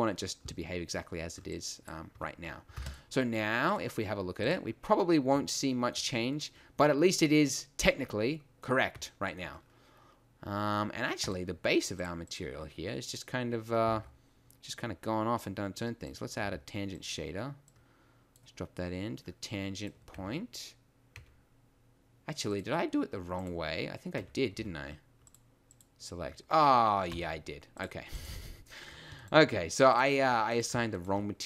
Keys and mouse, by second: 2.1 Tab, 2.7 ctrl+s, 16.1 shift+a, 16.5 g, 18.7 click, 20.3 Tab, 21.4 Tab, 24.2 Tab, 24.5 a, 27.1 a.